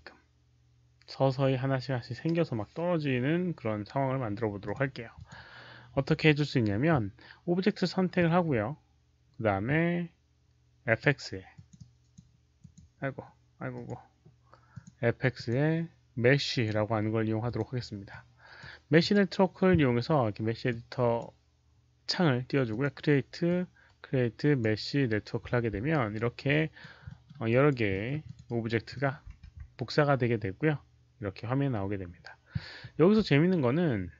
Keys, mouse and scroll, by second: 4.5 alt+click, 5.1 alt+click, 10.8 click, 10.8 q, 11.5 click, 11.7 click, 12.1 q, 12.5 click, 12.7 q, 13.6 click, 14.6 click, 14.6 q, 15.3 click, 15.4 q, 16.4 click, 17.4 click, 18.0 click, 18.9 click, 20.6 click, 22.6 click, 23.4-24.5 drag, 25.8 alt+right click, 26.4 alt+click, 27.0 alt+middle click, 27.4 alt+right click, 27.8 alt+middle click, 28.1 alt+click, 28.4 alt+right click, 28.8 alt+middle click, 29.4 q, 33.3 alt+middle click, 33.3 q.